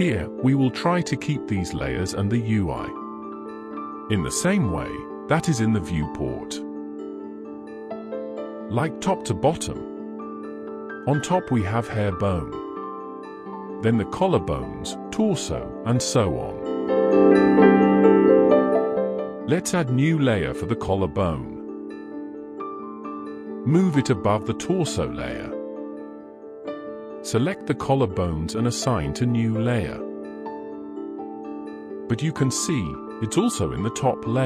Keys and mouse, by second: 1.0 click, 1.1-6.8 drag, 8.2 middle drag, 8.9-9.3 middle drag, 9.5 shift+middle click, 9.9 middle click, 10.9 click, 11.6 click, 12.2 click, 13.7-16.6 middle drag, 17.0-18.0 middle drag, 20.5 click, 21.8 click, 23.4 click, 24.7 middle drag, 25.6 click, 25.8 middle drag, 26.4 shift+click, 26.8 shift+click, 27.4 shift+click, 28.0 shift+click, 28.5 shift+click, 30.4 click, 31.3 click.